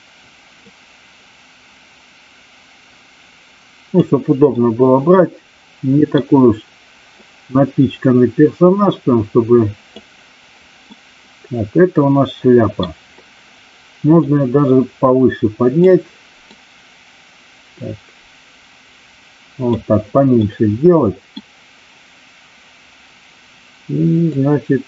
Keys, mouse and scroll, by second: 0.6-4.0 drag, 4.6-6.2 middle drag, 7.0-10.0 drag, 11.0-12.8 middle drag, 14.1-15.9 drag, 16.4-19.8 drag, 20.5 middle click, 24.2-24.8 drag.